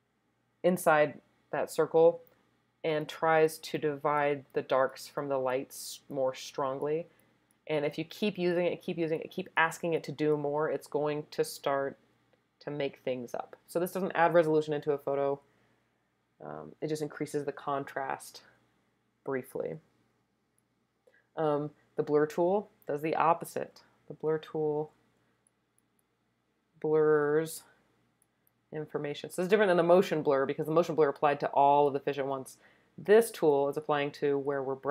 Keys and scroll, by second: 24.8 [, 25.0 [.